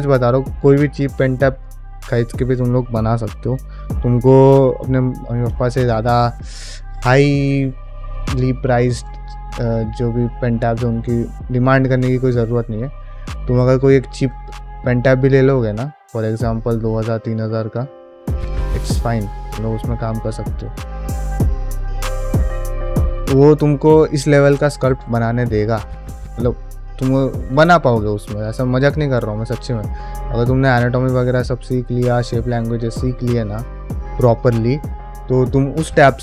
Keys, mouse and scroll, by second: 0.0 middle click, 5.5 middle click, 5.8 ctrl+Tab, 6.2 middle click, 6.7 shift+click, 7.3 f, 7.6 middle click, 7.9 shift+click, 8.7 middle click, 9.1 shift+click, 9.5 shift+middle click, 9.6 shift+click, 9.9 shift+middle click, 10.2 middle click, 10.5 shift+click, 11.5 middle click, 11.8 shift+click, 12.9 middle click, 13.3 shift+click, 13.9 middle click, 14.2 f, 14.5 shift+middle click, 14.8 middle click, 15.1 shift+click, 16.0 middle click, 16.3 shift+click, 16.9 shift+middle click, 17.2 middle click, 17.6 shift+click, 18.6 middle click, 19.1 shift+middle click, 19.6 Tab, 20.0 click, 20.2 middle click, 20.7 shift+Tab, 21.0 g, 21.8 shift+Tab, 22.1 g, 22.7 click, 22.9 g, 23.2 middle click, 23.5 middle click, 24.5 ctrl+Tab, 25.0-26.6 shift+drag, 26.7 shift+middle click, 27.0 middle click, 27.3-28.7 shift+drag, 28.9 shift+middle click, 29.1 middle click, 29.5 shift+click, 30.2 ctrl+middle click, 30.4 middle click, 30.8 shift+click, 31.3 shift+middle click, 31.6 middle click, 32.0 shift+click, 32.5 middle click, 32.8 shift+middle click, 33.1 middle click, 33.5 shift+click, 33.9 middle click.